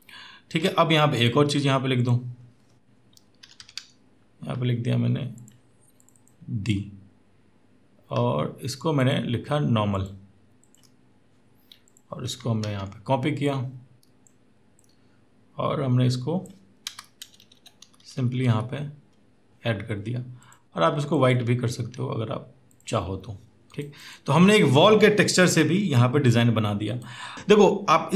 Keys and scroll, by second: 3.4 typing, 12.4 ctrl+t, 16.8 Return, 17.0 Left, 17.2 Left, 17.3 Left, 17.6 Down, 17.8 Down, 17.9 Down, 18.1 Down.